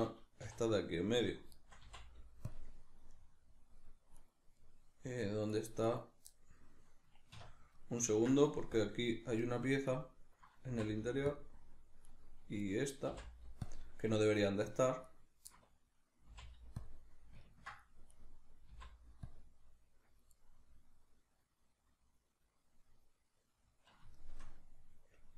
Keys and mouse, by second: 0.6 right click, 1.6 shift+right click, 1.8 x, 3.1-4.1 middle drag, 4.1 right click, 4.5 middle click, 5.5 right click, 5.9 right click, 6.3-8.8 middle drag, 7.3 \, 8.8 click, 9.4 middle click, 9.9 right click, 10.7 x, 12.1 right click, 12.6 right click, 13.1 x, 14.2 middle click, 15.0 right click, 15.5-18.1 middle drag, 16.3 x, 18.1 right click, 18.7 x, 20.4-25.3 middle drag.